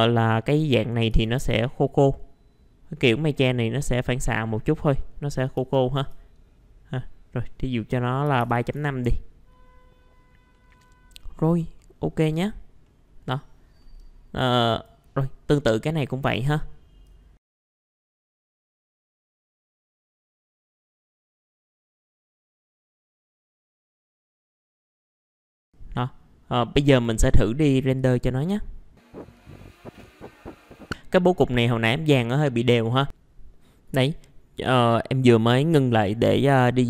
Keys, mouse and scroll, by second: 0.4 click, 1.1 KP_4, 5.5 KP_3, 8.4 KP_Decimal, 8.5 KP_5, 10.5 middle click, 10.8-11.8 scroll down 1, 11.8 middle click, 12.1-12.8 scroll down 1, 12.8 middle click, 14.7 click, 16.1 middle click, 17.4 click, 17.5 Escape, 17.5 middle click, 17.6 click, 18.3 typing, 18.5 Return, 18.7 middle click, 18.8 click, 18.9 right click, 19.0 click, 19.9 click, 20.2 scroll up 1, 20.3 middle click, 20.3 click, 20.4 ctrl+shift+click, 20.5 click, 20.7 Delete, 20.8 click, 21.7 click, 21.8 Delete, 22.4 click, 22.6 middle click, 22.7 scroll up 1, 22.7 click, 24.7 KP_3, 25.0 click, 25.3 middle click, 25.5 click, 26.9 right click, 28.0 click, 33.1 ctrl+r.